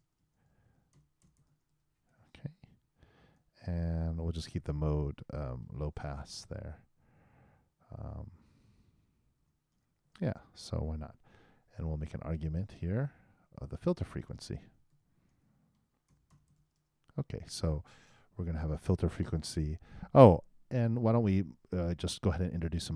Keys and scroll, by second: 0.2-1.4 typing, 5.6 shift+space, 9.4 shift+0, 10.0 shift+;.